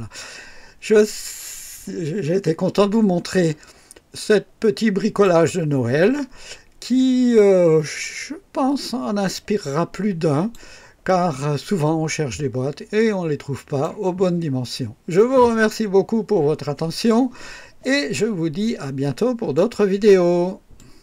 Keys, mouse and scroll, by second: 6.8 scroll up 1, 7.7 scroll down 1, 9.2-10.7 drag, 11.0-14.0 drag, 19.5 right click, 20.7 click.